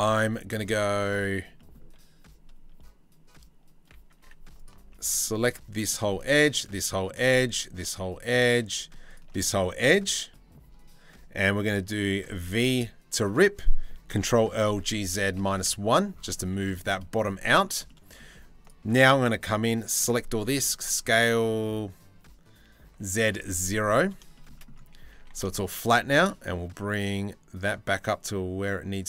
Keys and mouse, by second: 0.1-1.2 middle drag, 1.2 click, 1.4-3.8 middle drag, 3.8 2, 7.6 click, 9.1 click, 9.9 click, 11.8 v, 13.7 ctrl+l, 14.3 g, 20.2 s, 23.9 shift+middle click, 24.7 g.